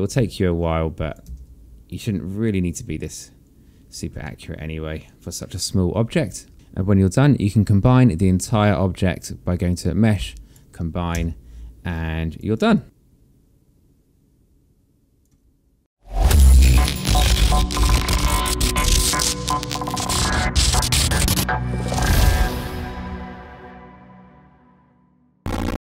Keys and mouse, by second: 0.4 click, 1.5 w, 2.2 click, 4.5 alt+middle click, 6.5 click, 9.9 click, 11.4 e, 12.1 click.